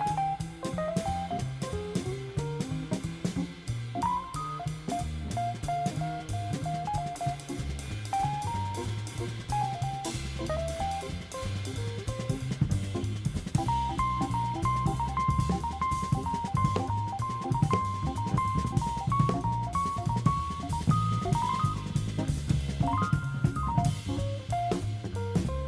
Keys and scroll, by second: 0.9 super+d, 2.0 super+d, 2.9 super+d, 3.5 super+d, 5.3 super+d, 13.5-14.4 typing.